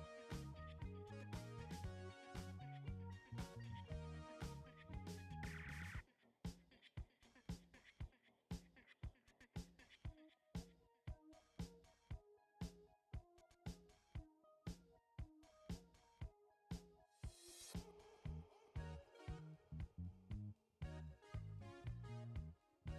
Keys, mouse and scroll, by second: 2.4 click, 4.6 right click, 8.2 click, 9.8 ctrl+e, 12.3 click, 18.3 click, 20.5-22.9 drag.